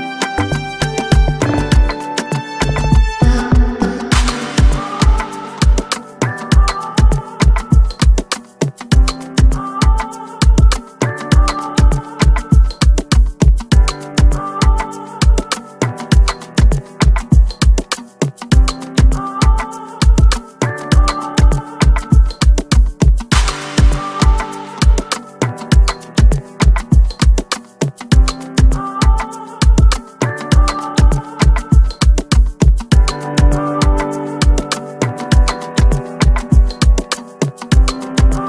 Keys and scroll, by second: 33.6 F10.